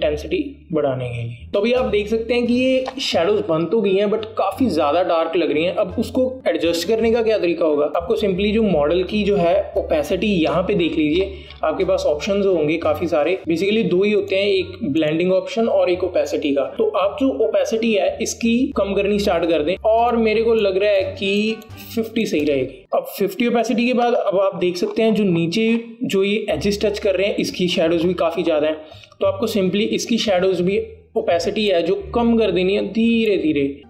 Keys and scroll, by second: 23.0 KP_5.